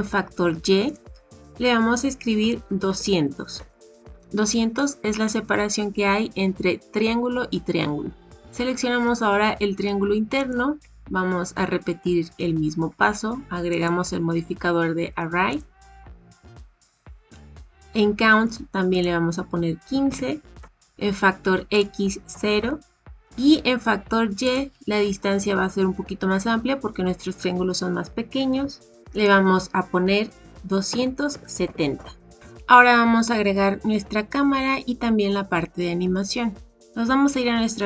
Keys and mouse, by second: 0.9-4.1 drag, 2.8 KP_0, 10.3 click, 13.6-15.6 drag, 18.9-20.6 drag, 21.9-23.0 drag, 24.5-28.9 drag, 29.2-32.4 drag.